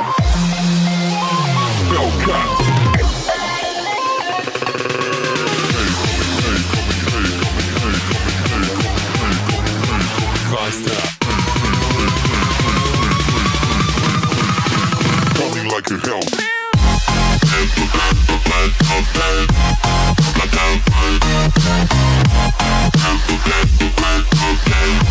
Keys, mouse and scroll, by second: 1.0 scroll down 1, 2.8 scroll down 1, 2.9 click, 3.6 ctrl+click, 4.5 right click, 5.7 click, 6.2 click, 6.4 ctrl+click, 7.4 click, 10.7 click, 13.2 click, 14.6 click, 15.5 click, 19.2 click, 20.1 click, 23.7 click, 24.8 click.